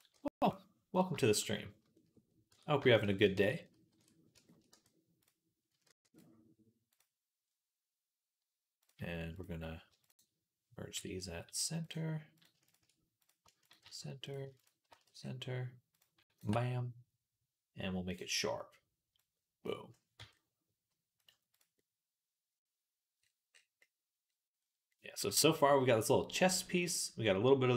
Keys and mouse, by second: 0.0 g, 0.9-2.1 shift+middle drag, 2.3 Tab, 2.7 shift+click, 3.7 ctrl+j, 4.5 Tab, 5.7 ctrl+r, 7.3 click, 7.6-12.2 middle drag, 9.8 shift+click, 10.8 m, 12.2 shift+click, 12.5 shift+middle click, 13.5 shift+click, 13.5 shift+middle click, 13.7 shift+r, 14.1 click, 14.1 shift+middle click, 14.4 shift+click, 14.5 middle click, 14.7 shift+r, 16.0 ctrl+middle click, 16.3-24.1 drag, 20.0 Tab, 21.6-24.1 right drag, 25.1-27.7 shift+middle drag.